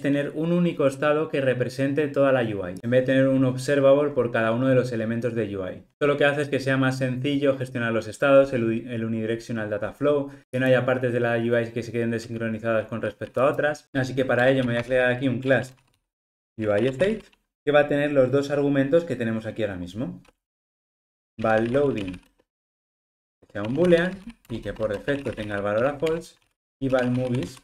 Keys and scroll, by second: 15.5 Return, 24.5 Return.